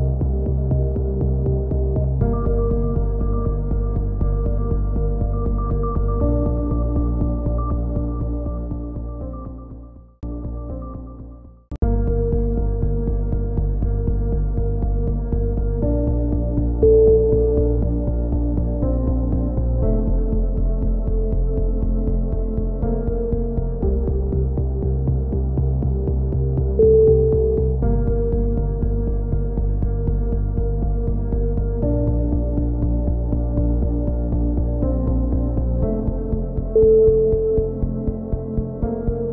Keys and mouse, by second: 0.0 KP_7, 0.4 z, 1.2 ctrl+r, 4.0 click, 4.5 middle click, 4.9 click, 5.1 middle click, 5.3-6.7 drag, 6.5 a, 6.9 z, 7.2 Tab, 7.5 click, 9.9 KP_3, 10.0-11.5 middle drag, 10.2 z, 12.0 Tab, 13.2 z, 13.7 z, 14.1 click, 15.5-16.6 middle drag, 16.6 z, 16.8-18.9 middle drag, 16.8 z, 17.2 z, 18.9-20.3 drag, 20.0 x, 21.6 click, 22.5 click, 26.7 a, 27.2 z, 27.6 middle click, 27.9 z, 29.2 click, 29.7 click, 31.2 z, 32.0-34.4 right drag, 34.4 middle click, 35.4 click, 35.6 z, 36.2 z, 37.3 click.